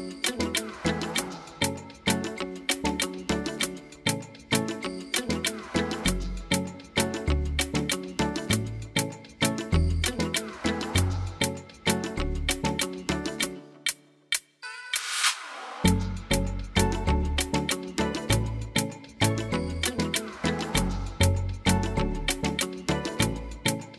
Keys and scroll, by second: 16.1-17.0 typing, 19.6 0, 20.2 0, 20.4 Return, 23.4 8, 23.6 Return.